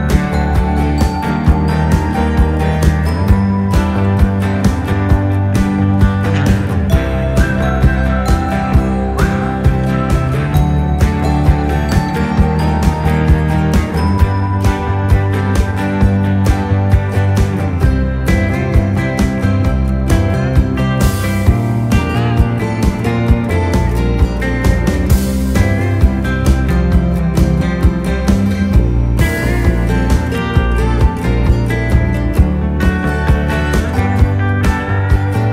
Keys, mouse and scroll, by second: 2.5 click, 3.1-3.7 scroll up 1, 4.6-5.4 typing, 4.7-5.3 scroll up 1, 7.4 click, 8.5-9.9 drag, 9.5 typing, 9.9 ctrl+c, 10.7 ctrl+f, 11.6 ctrl+c, 12.0 ctrl+f, 12.3-12.7 typing, 14.9 click, 14.9 typing, 17.5 ctrl+Num_Lock, 17.5 click, 17.5 typing, 18.1 ctrl+c, 18.7 ctrl+f, 19.6-20.3 typing, 20.3 click, 22.3 click, 22.3 typing, 24.5 click, 24.5 typing, 25.9 click, 25.9 typing, 27.1 click, 27.1 typing, 28.6 Right, 28.6 typing, 29.4 Down, 30.2 Down, 30.2 Right, 31.0 Down, 32.2 Down, 34.7 click, 34.7 typing.